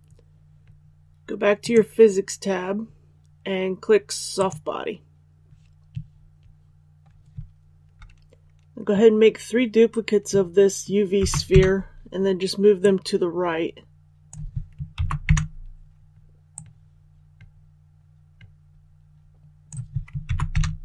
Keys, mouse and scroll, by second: 11.1 shift+d, 12.7-14.4 drag, 14.9 shift+d, 16.4-20.0 drag, 20.2 shift+d.